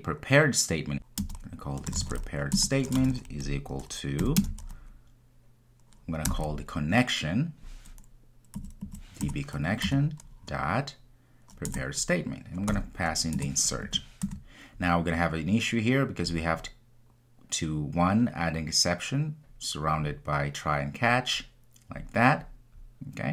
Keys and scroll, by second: 0.9 Return, 9.2 Return.